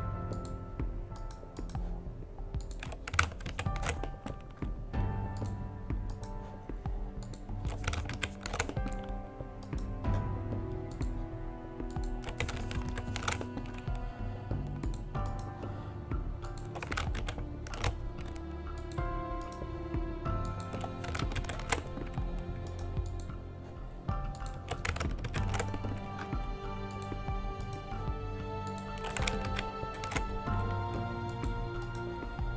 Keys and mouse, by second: 3.7 ctrl+shift+v, 6.4 ctrl+shift+v, 8.4 ctrl+shift+v, 13.1 ctrl+shift+v, 17.1 ctrl+shift+v, 17.4 ctrl+shift+v, 21.5 ctrl+shift+v, 25.4 ctrl+shift+v, 26.9 ctrl+shift+v, 29.7 ctrl+shift+v.